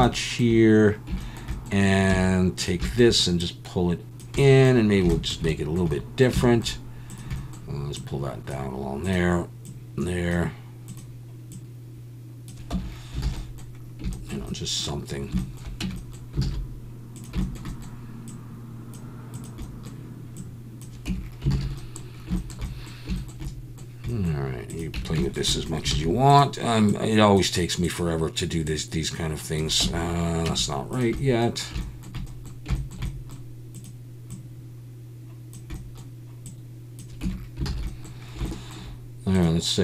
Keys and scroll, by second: 2.1 Tab, 12.7 Tab, 13.3 alt+a, 15.8 Tab, 16.4 alt+a, 21.1 Tab, 21.5 alt+a, 25.0 Tab, 25.9 alt+a, 29.8 Tab, 30.5 Tab, 37.2 Tab, 37.7 alt+a.